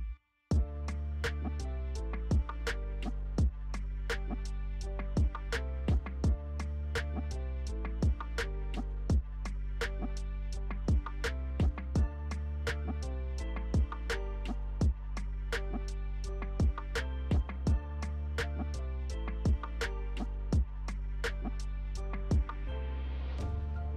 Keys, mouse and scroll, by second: 1.1-2.5 alt+scroll up 1, 3.1 alt+click, 10.0 alt+click, 10.7 alt+click, 18.2 alt+click, 19.4-23.9 alt+drag.